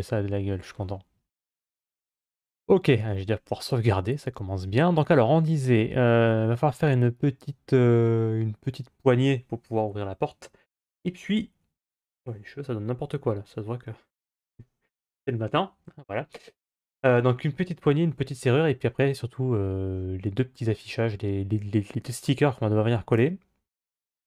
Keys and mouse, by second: 2.9 ctrl+s, 5.0-5.6 middle drag.